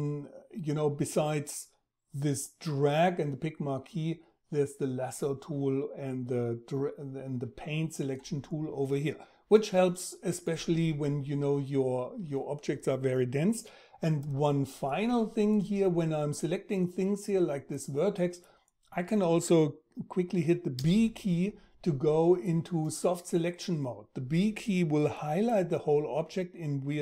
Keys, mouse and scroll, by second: 20.4 b.